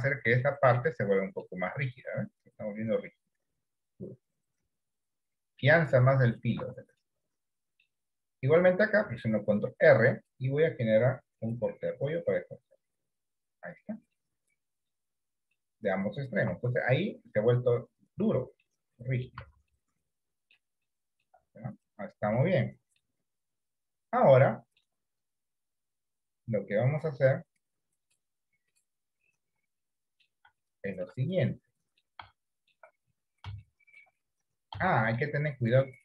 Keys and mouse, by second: 0.4 Tab, 0.8 middle click, 6.8 Tab, 7.2 middle click, 9.5 ctrl+r, 14.2 middle click, 15.5 middle click, 16.6 Tab, 18.7 middle click, 19.5 Tab, 19.8 middle click, 21.0 shift+middle click, 22.5 middle click, 24.6 middle click, 28.1 click, 28.8 click, 29.9 middle click, 30.8 shift+middle click, 31.7 middle click, 32.5 shift+middle click, 33.7 shift+middle click, 34.9 shift+middle click.